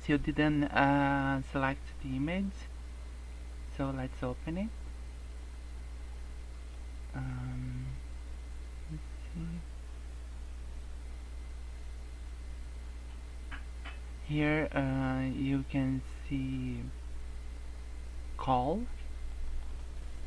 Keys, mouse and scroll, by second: 3.2 scroll up 2, 3.8 click, 19.8 click.